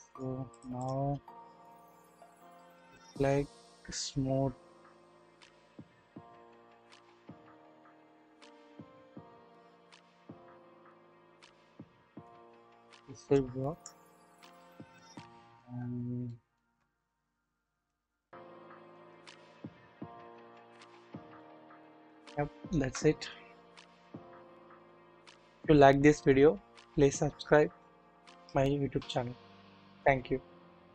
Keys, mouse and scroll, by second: 0.1-0.6 drag, 1.7-2.8 drag, 3.3-5.6 scroll up 1, 5.6 scroll down 1, 6.5-12.4 drag, 12.4-13.3 middle drag, 13.9-14.8 middle drag, 14.1-14.5 scroll up 1, 15.2-15.7 shift+middle drag, 15.8 scroll down 1, 16.3-16.6 shift+middle drag, 17.1 middle click, 18.1 scroll down 1, 18.6-18.9 shift+middle drag, 19.4-20.1 scroll up 1, 20.1-21.4 drag, 21.9 scroll down 1, 22.0-22.8 shift+middle drag.